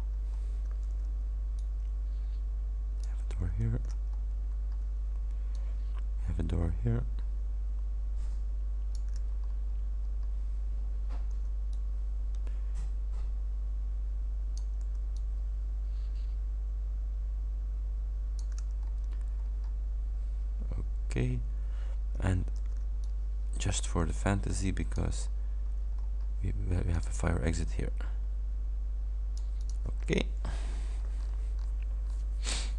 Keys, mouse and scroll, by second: 0.9 ctrl+d, 1.6-3.3 ctrl+drag, 3.5 ctrl+d, 4.1-4.8 ctrl+scroll up 4, 5.6-9.3 ctrl+drag, 9.5-10.0 ctrl+scroll up 3, 10.1 scroll down 2, 11.4 ctrl+d, 11.8-14.9 ctrl+drag, 14.9 ctrl+d, 15.3-18.7 ctrl+drag, 18.9-19.8 ctrl+scroll up 5, 22.7 ctrl+d, 23.1-25.2 ctrl+drag, 25.3-25.7 ctrl+scroll up 2, 26.0-26.3 ctrl+scroll up 2, 27.0 click, 27.6-29.9 drag, 30.1-30.4 ctrl+scroll down 2, 30.9-31.2 ctrl+scroll down 2, 32.1-32.6 scroll down 2, 32.6-32.7 scroll down 2.